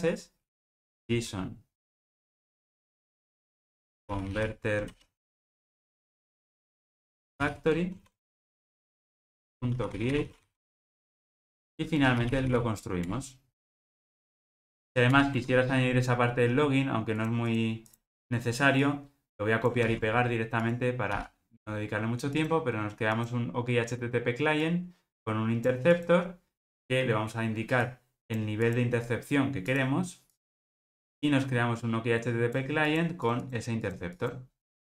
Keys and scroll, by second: 5.6 ctrl+space, 11.2 ctrl+alt+o, 21.1 super+v.